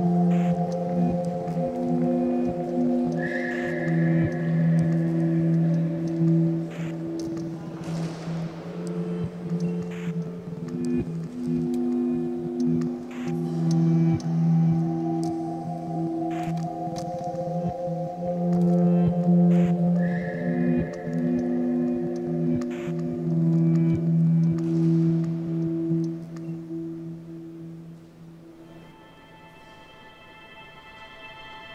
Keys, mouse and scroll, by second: 0.0 ctrl+right click, 1.8-3.2 ctrl+right drag, 3.2 r, 4.2 g, 5.2 r, 6.1 a, 6.3 a, 7.0-8.1 shift+middle drag, 8.1 2, 8.2 click, 8.4 click, 9.0 g, 10.2 a, 10.3 a, 10.6 click, 10.7 click, 11.2 g, 12.7-14.6 typing, 13.3 click, 16.6 a, 16.8 a, 17.0-17.9 scroll down 2, 17.9 shift+middle click, 18.3-18.9 scroll up 1, 18.9 click, 19.1 click, 19.7 a, 19.8 a, 20.2 2, 20.4 click, 21.0 ctrl+x, 21.8 ctrl+z, 22.4 click, 22.6 click, 22.9 ctrl+x, 23.7 ctrl+z, 24.5 r, 25.2 g, 26.6 a, 26.8 a, 27.8 click, 28.0 click, 28.3 g, 30.2 a, 30.4 a, 31.0 click, 31.2 click, 31.6 g.